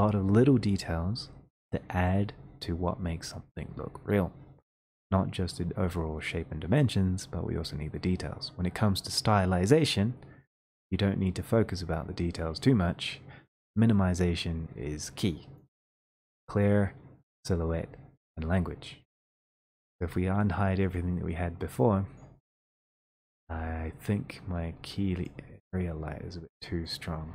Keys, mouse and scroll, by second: 4.5 middle click, 4.8 middle click, 7.5 middle click, 7.8 middle click, 8.6 middle click, 15.7 click, 23.8 click, 23.9-25.0 scroll, 25.2 click, 25.2 scroll.